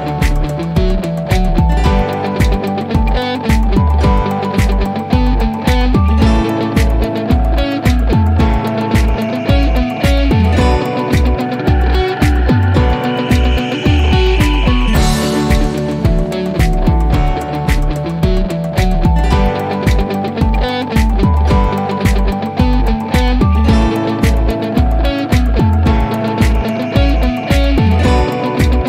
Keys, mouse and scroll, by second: 0.9 Return, 3.8 2, 4.2 Return, 6.9-7.4 click, 8.0 3, 8.4 Return, 14.9 click.